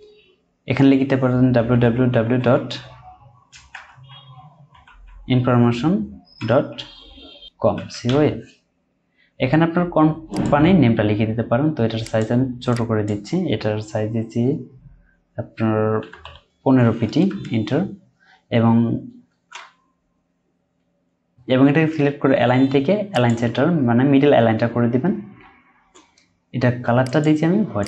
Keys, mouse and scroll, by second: 1.6-2.4 typing, 3.5-4.9 typing, 7.7-8.1 typing, 16.0 typing, 17.3 Return, 24.4 Down.